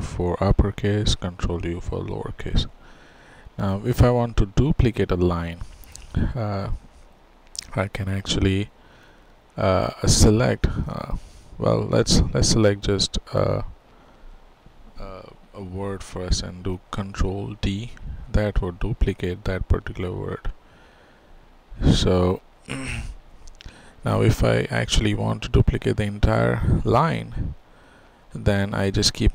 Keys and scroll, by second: 20.6 ctrl+d, 23.2 ctrl+z.